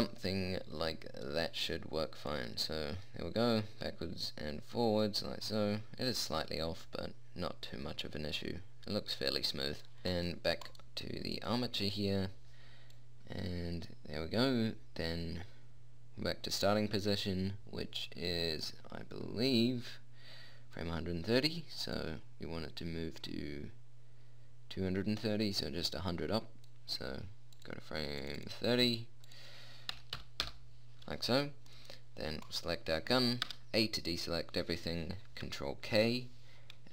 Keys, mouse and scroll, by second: 2.6-4.5 drag, 10.0-13.3 drag, 13.3 middle click, 13.9-15.2 drag, 22.3-24.4 drag, 27.9-30.8 drag, 32.1 click, 32.8 middle click, 33.8 a, 36.3 ctrl+k.